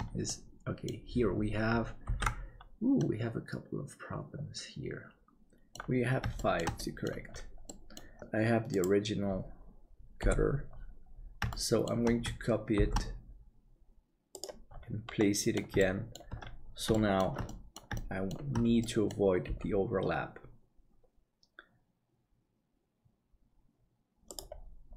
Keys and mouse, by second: 0.2 middle click, 2.2 ctrl+s, 3.0-5.7 middle drag, 5.1 ctrl+j, 6.4 shift+middle click, 6.8 middle click, 7.6-9.9 middle drag, 7.8 Delete, 10.1 KP_7, 11.5 shift+middle click, 12.8 shift+d, 15.3 middle click, 15.9 shift+middle click, 16.9 shift+middle click, 17.4 middle click, 18.1 shift+middle click, 18.9 middle click, 19.4 g.